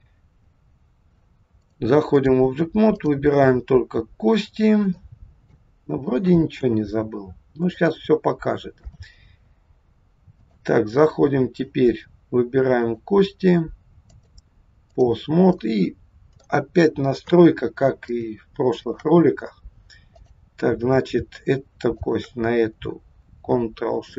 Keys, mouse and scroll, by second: 1.6 click, 2.9 click, 3.8-4.5 scroll down 3, 4.5 scroll down 2, 5.0 shift+middle click, 6.6 KP_1, 7.4 scroll down 1, 7.9 shift+middle click, 10.4 click, 12.8 click, 14.1 click, 15.5 middle click, 17.2 KP_3, 18.1 shift+middle click, 19.1-19.9 scroll up 2, 20.1 click, 22.0 shift+click.